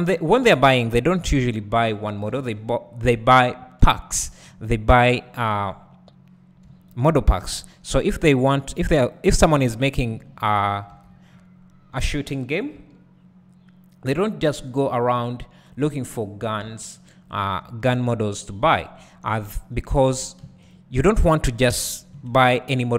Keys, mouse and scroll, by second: 0.5 w, 1.3 shift+click, 3.4-3.9 scroll down 2, 3.9 `, 4.5-5.2 scroll up 2, 5.2 click, 6.7 `, 7.6-8.1 scroll down 2, 8.1 `, 8.2-8.8 scroll up 2, 8.8-9.2 scroll up 1, 9.2 shift+click, 10.5 KP_3, 11.0 KP_7, 12.0-13.5 scroll down 1, 13.5 g, 15.0 click, 16.6 g, 17.4 click, 17.6 `, 19.0-19.3 scroll up 1, 19.3 `, 20.7 shift+click, 22.1 KP_Decimal.